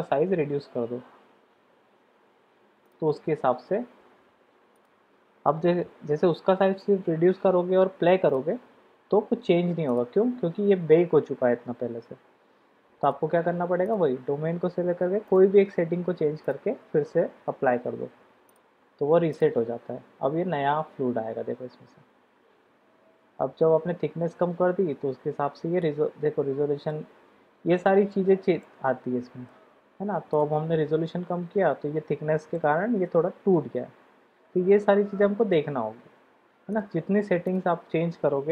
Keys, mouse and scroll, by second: 0.0 s, 4.8 click, 8.3 click, 10.0 click, 13.0 click, 15.9-18.7 drag, 19.3 click, 26.4-27.6 middle drag, 29.4-30.6 middle drag, 32.5-35.5 middle drag, 36.7 click.